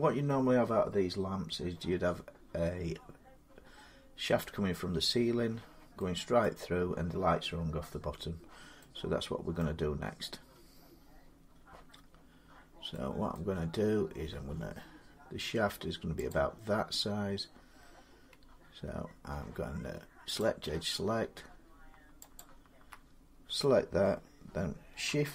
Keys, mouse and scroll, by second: 3.3 scroll, 6.2 middle click, 9.4 middle click, 12.1 scroll, 12.3 scroll down 4, 13.1 scroll up 1, 13.8 scroll down 2, 16.1 click, 20.2 click, 22.2 alt+click.